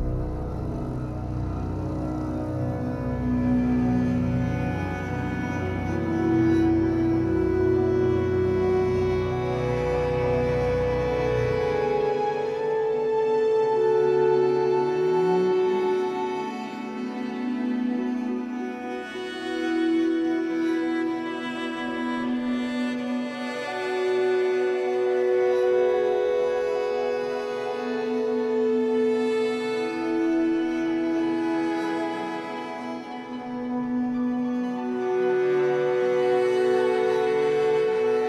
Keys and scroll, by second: 7.9 w, 10.0 Escape, 14.3 3, 21.4 shift+Down, 22.3 m, 24.1 Escape, 25.5 ctrl+s, 37.6 2.